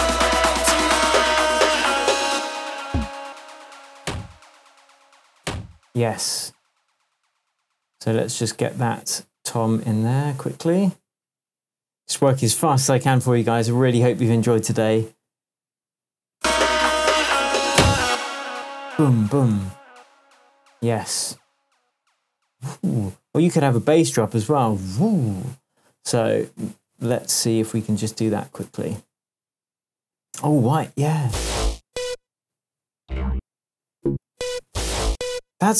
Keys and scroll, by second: 2.3 space, 8.4 super+t, 18.0 space, 23.8 super+t, 26.9 Up, 28.6 Right, 29.0 Down, 30.4 Right, 30.8 Down, 33.3 Up, 35.0 Down.